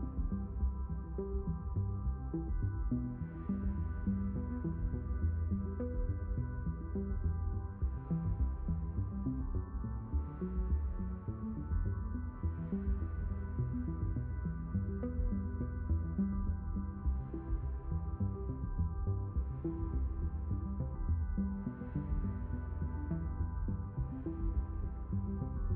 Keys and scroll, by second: 11.7 b.